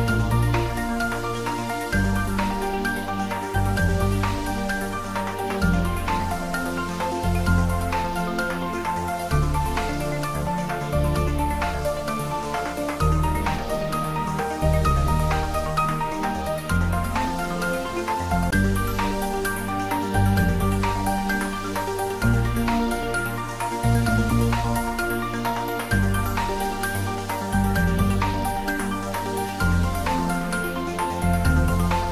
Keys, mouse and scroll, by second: 3.7 click, 6.1 click, 6.3 ctrl+z, 7.5 s, 8.0 y.